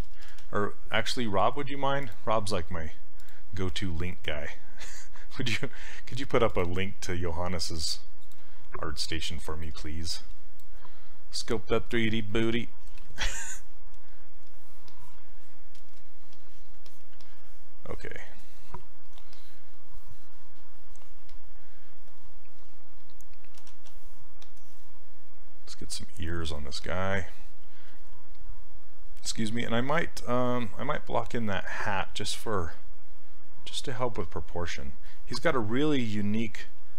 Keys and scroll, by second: 0.0 BackSpace, 21.3 s, 23.7 ctrl+z.